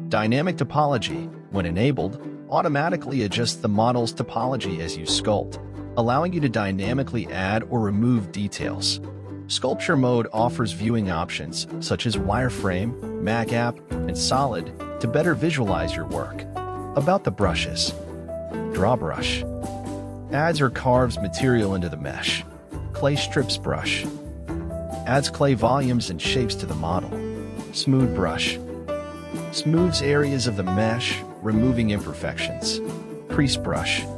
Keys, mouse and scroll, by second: 2.9 ctrl+z, 5.4 click, 6.2 click, 7.2 middle click, 7.4 ctrl+z, 7.8 click, 8.7 middle click, 9.0 ctrl+z, 9.3-10.4 drag, 10.4 ctrl+z, 10.7-11.8 drag, 11.9 middle click, 12.2 ctrl+z, 12.5-13.6 drag, 13.7 middle click, 14.1 ctrl+z, 14.4 click, 14.5 middle click, 14.8 click, 16.3 ctrl+z, 16.5-17.6 drag, 17.7 middle click, 18.0 ctrl+z, 18.4-19.5 drag, 19.6 middle click, 20.0 ctrl+z, 20.3 click, 21.0 middle click, 21.4 ctrl+z, 21.5 click, 21.9 ctrl+z, 22.1-23.3 drag, 23.4 ctrl+z, 23.8-24.8 drag, 24.9 middle click, 25.4 ctrl+z, 25.8 click, 25.9 middle click, 26.1 click, 27.1 middle click, 27.6 ctrl+z, 27.8-28.9 drag, 29.2 middle click, 29.8 ctrl+z, 30.2-31.2 drag, 31.5 middle click, 32.0 ctrl+z, 32.2 click, 32.4 middle click, 32.5 click, 33.5 middle click, 33.8 ctrl+z, 33.9 middle click, 34.1 click.